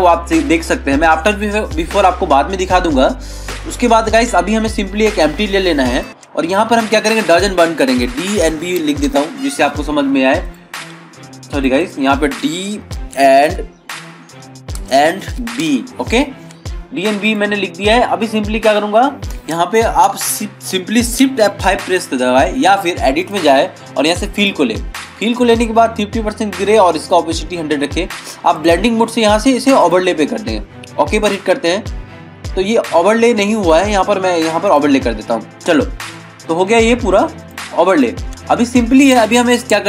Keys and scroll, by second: 0.8 ctrl+-, 36.3 ctrl+=.